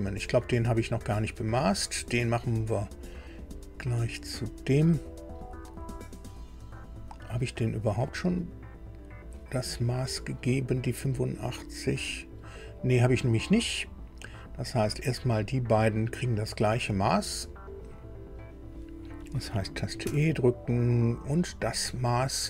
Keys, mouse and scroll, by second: 1.6 click, 3.4 click, 6.8 click, 11.6-12.9 drag, 15.0 click, 15.5 click, 17.7 click, 20.0 e, 21.4 click.